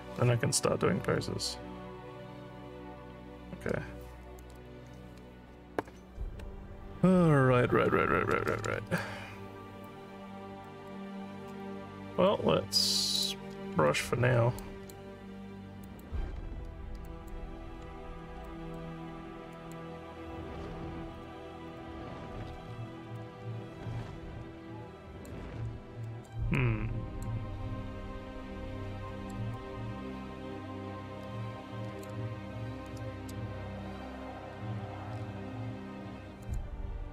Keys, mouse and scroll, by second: 9.0 alt+click, 10.3 alt+scroll down 2, 10.7 alt+middle click, 12.2 click, 13.2 click, 14.6 click, 15.9 click, 17.1 click, 18.4 click, 19.5 click, 21.2 click, 21.7 click, 22.7 alt+middle click, 23.2-25.3 alt+drag, 26.0 alt+middle click, 26.5 alt+click, 27.9 alt+scroll up 1, 29.1 alt+middle click, 29.5-32.0 alt+drag, 36.4 click.